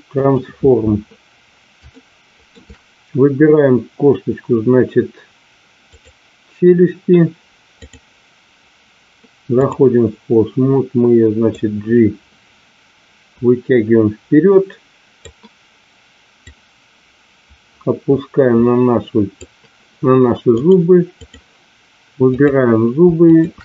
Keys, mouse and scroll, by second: 1.9-2.5 shift+middle drag, 5.8 click, 7.8-9.8 drag, 11.7-15.7 drag, 16.4-19.6 drag, 20.6-21.6 drag, 22.3 click, 23.3 shift+click.